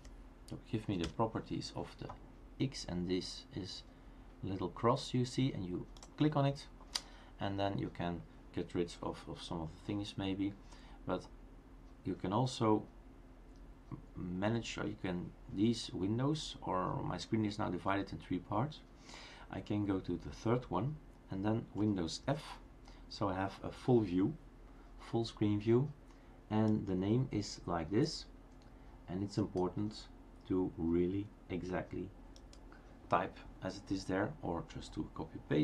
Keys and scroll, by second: 1.0 Return.